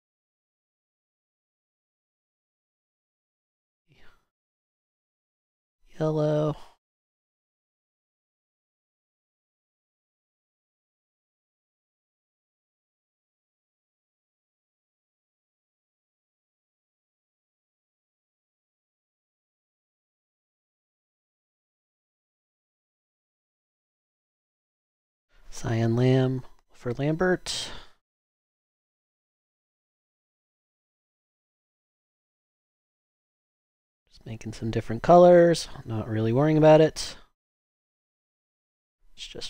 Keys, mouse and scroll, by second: 8.6-12.6 typing, 14.8 super+d, 14.9 super+d, 22.7-25.6 typing, 28.4 super+d, 38.1-39.4 typing.